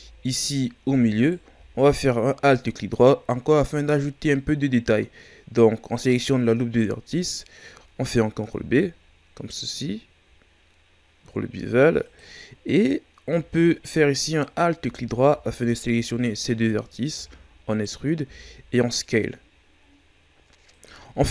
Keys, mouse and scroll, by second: 1.2 alt+right click, 8.5 ctrl+b, 12.5-14.2 scroll up 4, 14.4 alt+right click, 15.6 alt+shift+right click, 16.5 scroll down 3, 17.1 e, 21.1 Tab.